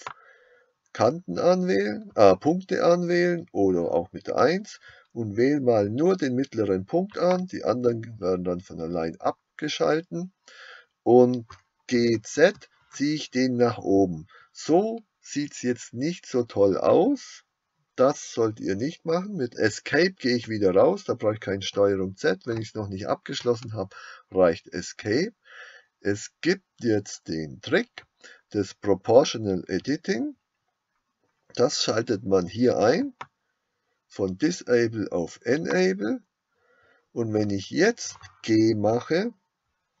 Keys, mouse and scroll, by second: 12.0 g, 35.7-40.0 drag.